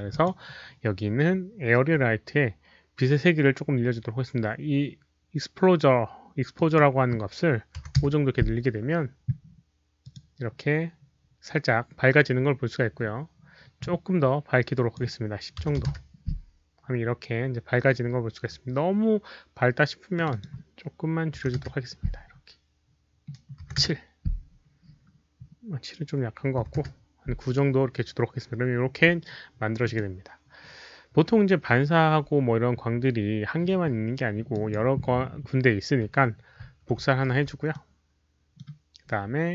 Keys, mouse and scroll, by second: 0.0 drag, 2.0 click, 4.3 click, 4.9 click, 6.5 click, 7.7 click, 7.9 Return, 7.9 KP_5, 10.0 Return, 10.0 click, 10.0 KP_5, 10.1 KP_5, 11.6-11.9 scroll up 1, 11.9 Return, 11.9 click, 11.9 KP_5, 12.3-13.2 scroll down 2, 14.7 click, 15.5-16.3 typing, 15.8 Return, 16.3 Return, 16.3 click, 17.3 middle click, 17.3 click, 20.1 click, 20.1 KP_0, 20.1 KP_1, 20.2 click, 21.3 KP_7, 21.5 Return, 23.6 Return, 23.6 click, 23.6 KP_7, 23.6 KP_0, 23.6 KP_1, 25.5 Return, 25.5 click, 25.5 KP_7, 25.5 KP_0, 25.5 KP_1, 26.6 Return, 26.6 click, 26.6 KP_9, 26.6 KP_7, 29.3 Return, 29.3 KP_9, 29.8 click, 29.9 Return, 29.9 KP_9, 29.9 KP_7, 32.1 Return, 32.1 click, 32.1 KP_9, 32.1 KP_7, 34.2 Return, 34.2 KP_9, 34.5 drag, 36.5 ctrl+d, 36.5 Return, 36.5 KP_9, 37.0 KP_9, 37.2 w, 38.2 w, 38.3 ctrl+d, 38.3 middle click, 38.3 click.